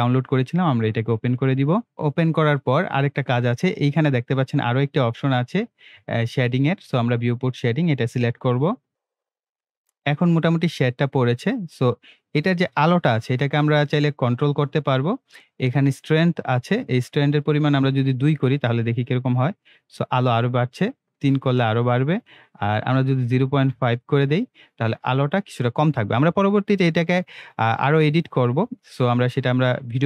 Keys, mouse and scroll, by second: 1.2 click, 1.2 click, 8.4 click, 11.8 scroll down 1, 12.2 scroll up 1, 21.7 click, 26.5 scroll down 1, 27.0 scroll up 1, 27.7 scroll down 1, 28.4-29.3 scroll down 1.